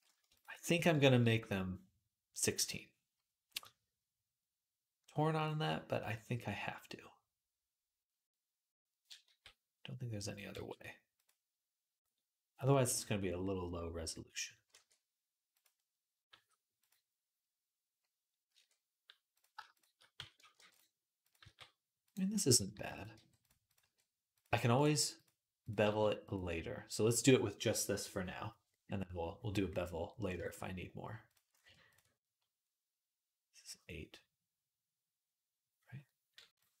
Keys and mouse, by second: 2.4 click, 2.5-15.6 middle drag, 9.1 g, 10.3 e, 14.5 e, 16.1 g, 18.3 e, 20.0 f, 20.4 ctrl+r, 21.2 g, 22.2-36.8 ctrl+middle drag, 22.5 ctrl+r, 22.9 g, 23.6 g, 24.7 g, 25.7 g.